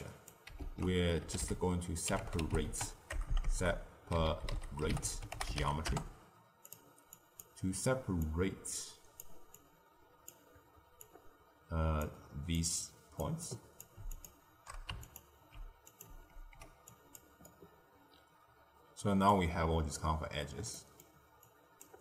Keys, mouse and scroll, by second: 0.5 ctrl+a, 3.2 BackSpace, 3.3 BackSpace, 7.0 click, 8.2 click, 9.5 click, 11.0 click, 12.5 drag, 13.4 click, 14.1 ctrl+shift+click, 15.0 alt+shift+click, 15.8 click, 16.3 ctrl+x, 16.8 click, 17.4-19.4 middle drag, 19.4-20.7 scroll up 1, 20.7 middle click, 21.4 click.